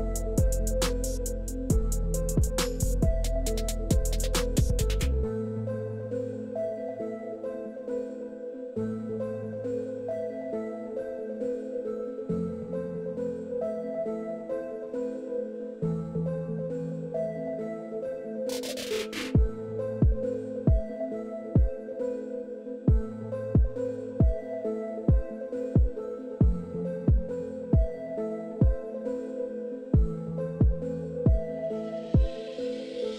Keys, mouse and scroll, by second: 1.1 click, 3.7 click, 5.6 click, 6.6 click, 8.0-10.8 drag, 11.3 middle click, 11.6 middle click, 12.1 middle click, 13.3-16.0 drag, 16.3 middle click, 17.5 middle click, 20.0-21.1 drag, 26.3 click, 29.1 click, 30.5 click, 31.5 click, 32.7-33.1 drag.